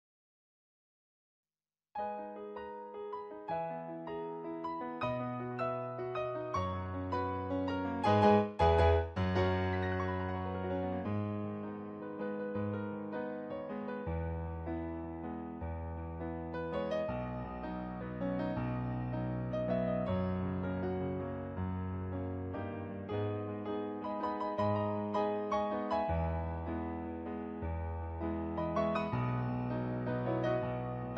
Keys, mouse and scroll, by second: 0.2 ctrl+z, 3.2 ctrl+z, 3.5 ctrl+z, 4.2 ctrl+z, 10.3 ctrl+z, 10.6 ctrl+z, 11.2 ctrl+z, 11.5 ctrl+z, 13.3 ctrl+z, 14.9 ctrl+z, 17.0 ctrl+z, 18.8 ctrl+z, 20.9 ctrl+z, 21.8 ctrl+z, 25.0 ctrl+z, 25.4 ctrl+z, 26.8 ctrl+z, 27.5 ctrl+z, 28.7 ctrl+z, 29.8 ctrl+z.